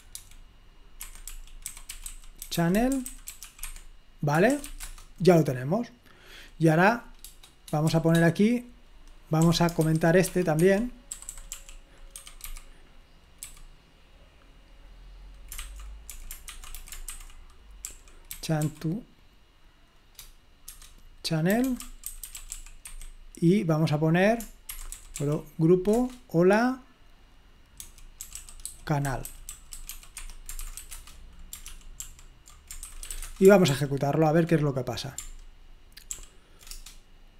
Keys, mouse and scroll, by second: 0.0-5.3 typing, 1.0 Escape, 9.4-12.5 typing, 10.6 Escape, 13.5 typing, 15.6-19.1 typing, 21.4-23.0 typing, 24.9-25.7 typing, 26.0 Return, 27.6-31.2 typing, 31.7 ctrl+p, 32.0 ctrl+p, 33.0-34.2 typing, 36.1 ctrl+p, 36.8 Return.